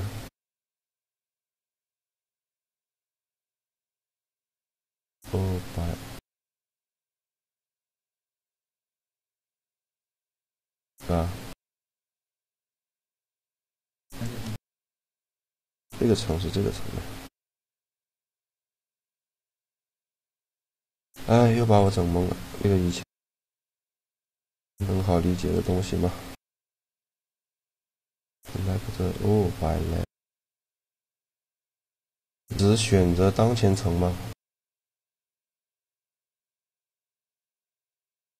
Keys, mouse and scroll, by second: 2.2-5.2 drag, 8.5 right click, 9.2 middle click, 9.5 click, 10.5-11.9 middle drag, 12.6-16.8 drag, 16.0 a, 16.9 a, 19.0 a, 20.5-22.1 drag, 24.2 click, 25.3 click, 25.3-26.8 right drag, 27.9 click, 31.0-32.7 middle drag, 34.1-36.2 middle drag.